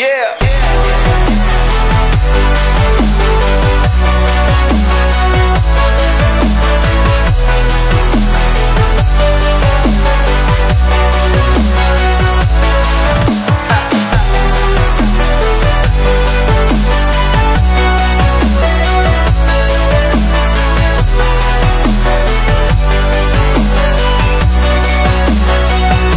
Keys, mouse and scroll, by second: 0.2 shift+middle click, 0.9 click, 1.6-3.8 drag, 4.2 shift+click, 5.3 x, 6.8 click, 7.2 x, 8.5-10.5 drag, 10.8 ctrl+a, 12.7 click, 13.4 click, 14.4-16.6 drag, 16.6-16.9 middle drag, 16.9 scroll up 3, 17.2 shift+middle click, 17.9 click, 18.9-19.2 middle drag, 19.7-23.2 drag, 23.8-25.5 scroll down 1.